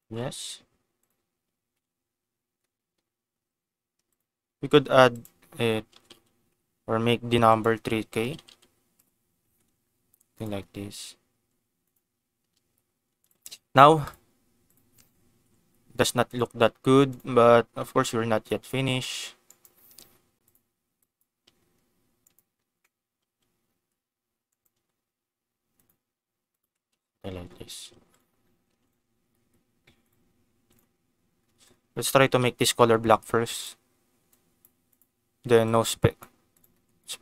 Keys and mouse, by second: 0.9 click, 1.6 ctrl+s, 4.1 click, 5.1-9.8 drag, 6.1 0, 8.3 0, 8.4 0, 9.5 ctrl+s, 10.4 click, 11.8 click, 12.6 g, 13.2 click, 14.0 click, 14.6 click, 15.3 ctrl+s, 16.2 click, 17.1 click, 17.6 Tab, 18.5 click, 18.9 g, 19.4 right click, 20.4 click, 20.9 click, 21.4 g, 22.2 right click, 23.2 g, 24.4 right click, 24.7 r, 25.7 click, 25.8 g, 26.4 click, 26.6 Tab, 27.8 ctrl+s, 28.1 click, 28.8 click, 30.0 click, 32.1 a, 32.3 KP_Decimal, 34.8 click, 35.6 click, 36.4 click.